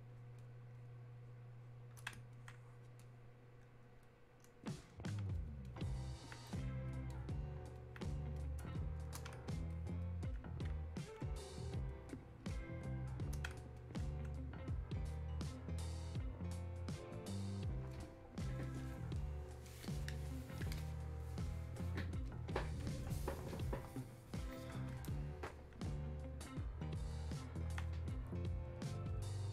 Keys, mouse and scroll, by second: 6.3-9.7 alt+drag, 11.0-13.8 drag, 13.8-20.4 alt+drag, 23.7-27.3 drag.